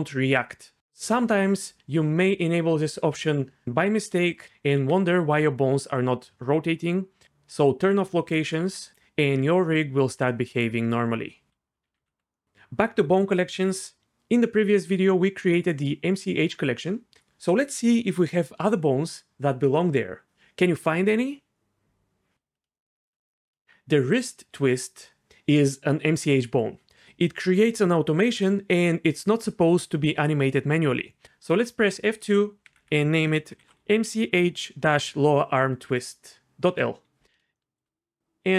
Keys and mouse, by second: 4.4 r, 4.7 r, 8.3 click, 8.6 r, 9.3 r, 11.5 a, 11.9 alt+r, 12.0 alt+g, 24.1 alt+click, 31.9 F2, 32.8 Left, 33.6 shift+BackSpace, 38.5 click.